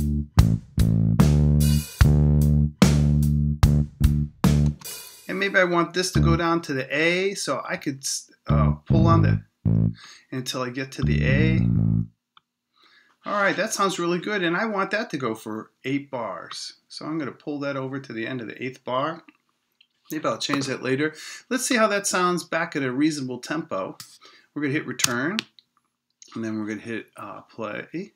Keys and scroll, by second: 4.6 space, 25.0 Return.